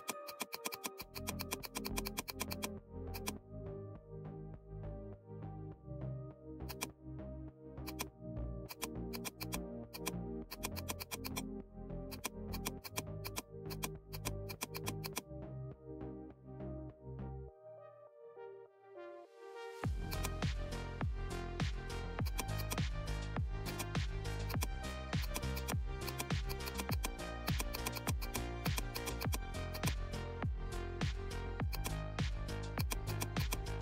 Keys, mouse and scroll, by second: 5.0-5.5 scroll up 2, 6.6 click, 6.6 click, 7.4 right click, 7.8 click, 8.6 click, 16.5 scroll down 2, 18.3 alt+scroll up 1, 20.1 click, 20.1 click, 20.5 alt+scroll up 1, 22.2 click, 22.9 right click, 26.9-33.8 drag.